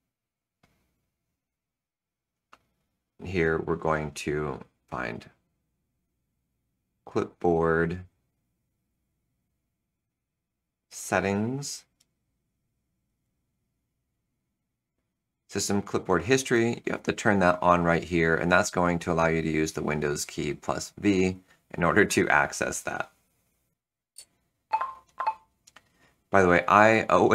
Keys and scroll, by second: 24.1 super+h.